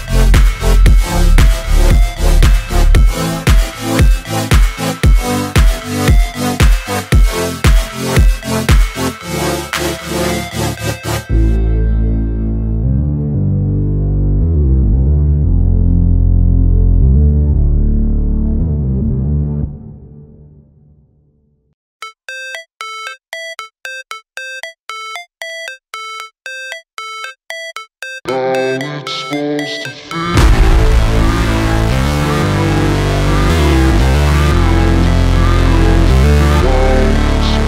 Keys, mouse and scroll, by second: 0.8 alt+scroll up 1, 1.0-5.6 drag, 5.8 space, 7.0-12.8 drag, 13.6 space, 15.3 alt+scroll down 1, 15.8-17.9 drag, 17.9-20.2 alt+drag, 20.4 space, 22.6-24.6 drag, 28.4-29.2 scroll up 1, 29.2 click, 30.3 r, 31.1 alt+click, 31.6-33.5 typing, 33.7 Left, 34.8 e, 34.9 Right, 36.0 Up, 37.5 click.